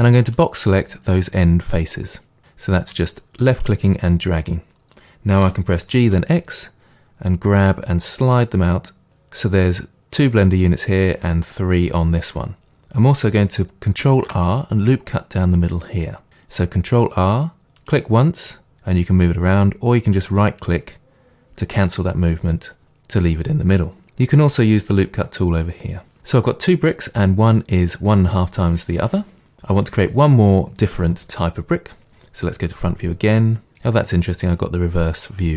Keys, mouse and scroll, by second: 0.0-0.6 drag, 3.1-5.4 drag, 5.4 g, 9.1 click, 14.2 ctrl+r, 20.4 right click, 23.2-29.7 middle drag, 32.7 KP_1.